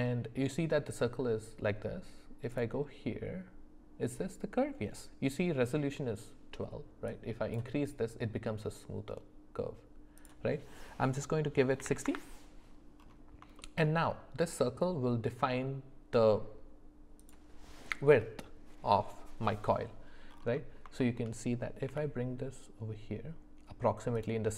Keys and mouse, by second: 7.2 click, 10.2-12.1 drag, 13.6 shift+middle click, 15.4 s, 21.0 shift+middle click, 21.9 g.